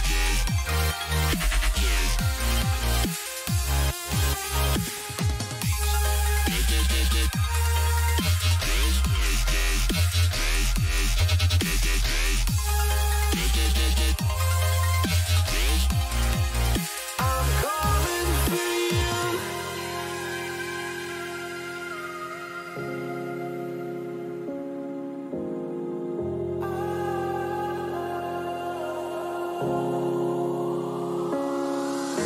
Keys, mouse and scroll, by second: 28.8-32.2 middle drag.